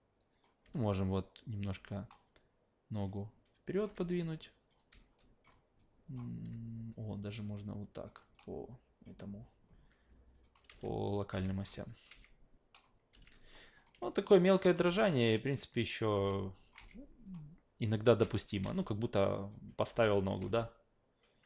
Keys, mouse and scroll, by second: 0.6 w, 1.9-3.8 alt+drag, 4.0 w, 4.1 click, 4.9 w, 5.0-5.4 drag, 5.8-6.1 alt+drag, 6.9 click, 8.3-9.0 alt+drag, 10.3 click, 10.7 alt+v, 11.3 alt+v, 11.5 click, 11.9 alt+drag, 12.1 alt+v, 13.1 alt+v, 13.8 click, 14.1 alt+right drag, 14.3 alt+click, 14.8 alt+v, 15.5 alt+right click, 16.1 alt+v, 16.6 click, 16.8 alt+v, 18.2 alt+v, 18.4 click, 18.6 alt+v, 18.9-19.5 alt+drag, 19.9 alt+v, 20.2 click, 20.4 alt+v.